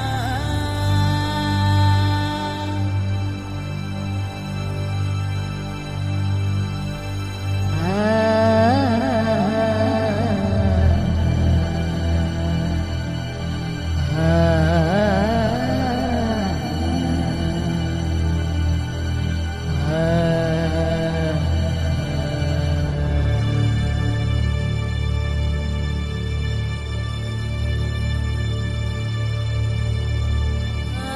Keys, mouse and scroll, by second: 0.2 click, 0.5 Tab, 1.0 l, 1.3 shift+d, 1.7 click, 2.3 p, 2.7-3.8 middle drag, 4.0 click, 4.7 Tab, 5.0 click, 6.3 middle click, 7.4 ctrl+alt+middle click, 7.7 click, 8.7 KP_3, 9.1 click, 10.3 click, 10.9 middle click, 11.6 click, 12.3 KP_1, 13.7 s, 14.4 r, 16.3 middle click, 16.5 KP_3, 17.5 z, 18.5 z, 19.6 middle click, 19.9 click, 20.5 shift+d, 21.4 middle click, 21.7 click, 22.3 middle click, 22.8 click, 23.4 click, 24.3 middle click, 24.8 click, 25.3 middle click, 26.0 middle click, 26.7 click, 27.7 click, 28.3 click, 29.3 KP_1, 29.9-30.9 middle drag.